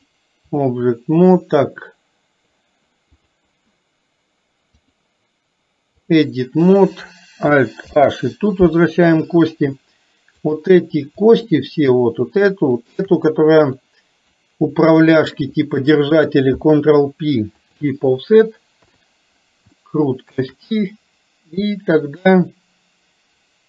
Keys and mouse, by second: 0.2 click, 3.3 click, 4.9-6.2 drag, 7.9 alt+h, 11.5 middle click, 12.9 shift+click, 13.9 middle click, 15.2 shift+click, 16.7 ctrl+p, 18.8 KP_3, 19.8 shift+middle click, 22.3-23.6 shift+middle drag.